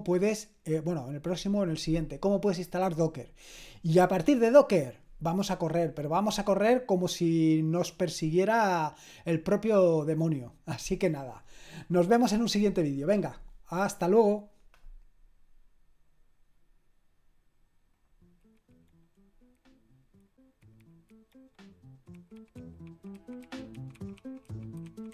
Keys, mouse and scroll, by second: 17.9 click, 25.0 click.